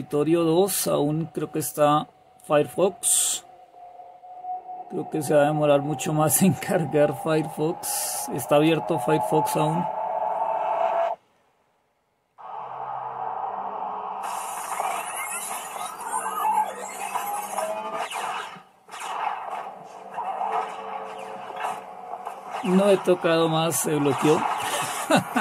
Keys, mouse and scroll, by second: 0.0 super+2.